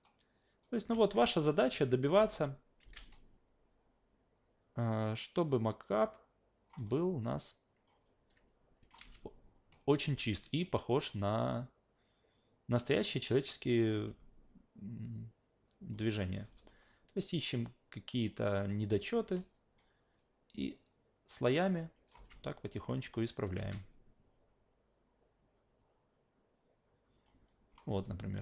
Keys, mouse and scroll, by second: 0.0 click, 1.0 ctrl+z, 2.0 click, 2.2 alt+v, 2.8 alt+v, 3.0-6.7 drag, 7.0-7.9 alt+drag, 8.8 click, 9.0 alt+v, 10.0 alt+v, 10.3 click, 10.8-15.9 drag, 16.4 e, 17.5 click, 19.5 click, 20.2-22.1 drag, 22.2 alt+v, 23.6 alt+v, 23.7 click, 27.9 w.